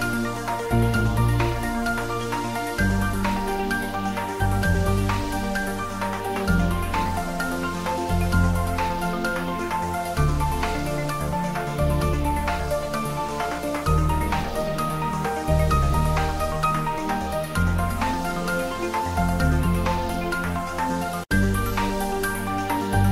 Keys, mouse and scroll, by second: 0.3 shift+click, 1.2-2.0 typing, 2.8 click, 3.0 middle click, 3.8 click, 7.9 ctrl+a, 8.2 click, 9.7 ctrl+middle click, 10.4 click, 11.8 Return, 12.6 click, 13.3 Return, 14.2 click, 15.7 Return, 17.1 click, 19.9 Return, 21.2 click.